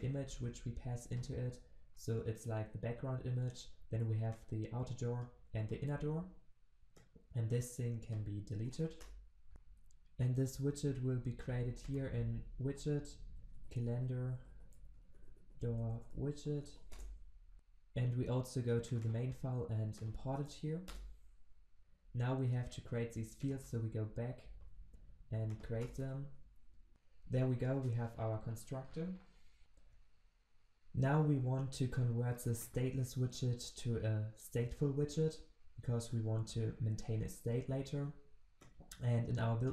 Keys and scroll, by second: 9.5 Delete, 20.4 alt+Return, 23.5 ctrl+b, 35.0 alt+Return.